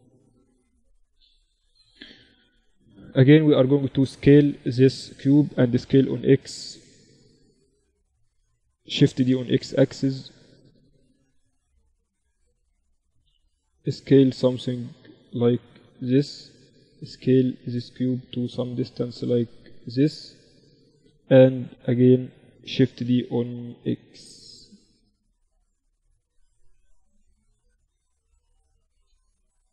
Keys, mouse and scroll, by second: 2.7 s, 5.1 s, 8.4 shift+d, 12.6 s, 14.9 z, 15.5 z, 16.2 s, 18.2-19.9 right drag, 18.5 s, 21.0-22.9 middle drag, 22.3 shift+d, 22.9 click, 25.6-27.5 right drag, 26.2-28.2 drag, 27.5 s.